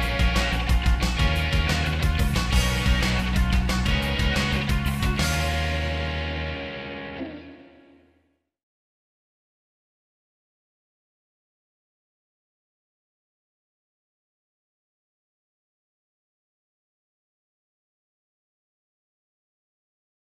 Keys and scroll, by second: 0.5 ctrl+z, 0.7 ctrl+z, 2.2 ctrl+s, 4.4 ctrl+z, 7.5 ctrl+s.